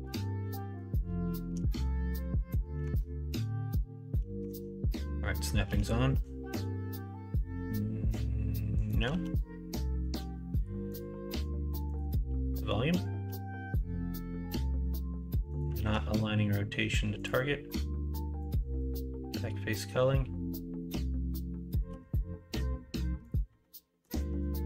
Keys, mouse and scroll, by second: 0.6 middle click, 1.7 shift+Tab, 2.8 Tab, 4.4 shift+Tab, 5.3 middle click, 5.6 g, 9.1 ctrl+z, 12.0 click, 12.5 middle click, 13.2 g, 15.7 ctrl+z, 18.7-21.8 drag, 21.8 g, 23.6 middle click, 24.2 ctrl+z, 24.5 middle click.